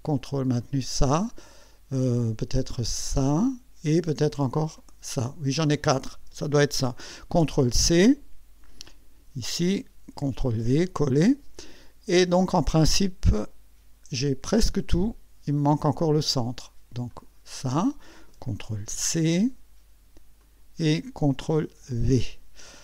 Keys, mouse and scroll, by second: 0.6 ctrl+click, 3.1 ctrl+click, 4.8 ctrl+click, 7.4 ctrl+c, 8.9 click, 10.4 ctrl+v, 15.7 click, 17.1 click, 18.9 ctrl+c, 20.4 click, 21.8 ctrl+v.